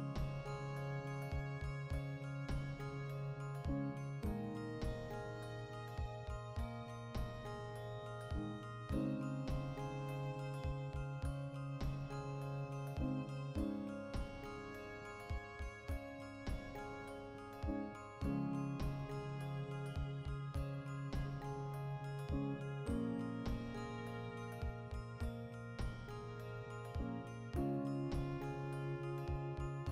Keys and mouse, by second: 1.1 right click, 1.3-3.7 middle drag, 2.1 KP_Decimal, 3.0 x, 3.7 right click, 3.9 x, 4.2 right click, 4.4 x, 4.7 middle click, 5.5 right click, 5.9 KP_Decimal, 6.0-11.9 middle drag, 11.0 r, 11.9 right click, 12.0-13.0 middle drag, 13.0 g, 13.9 right click, 14.5-23.1 shift+middle drag, 23.1 right click, 23.5 1, 25.2-29.9 drag.